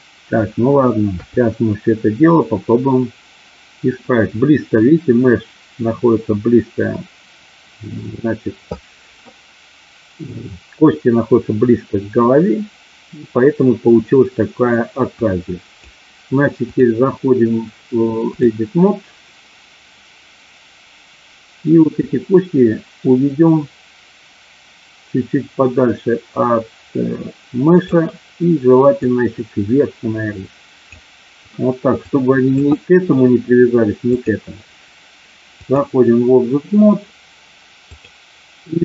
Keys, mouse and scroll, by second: 1.2 KP_3, 15.3 click, 16.7-18.6 drag, 22.0-27.8 drag, 29.0-31.0 drag, 32.1 click, 34.0-35.8 drag.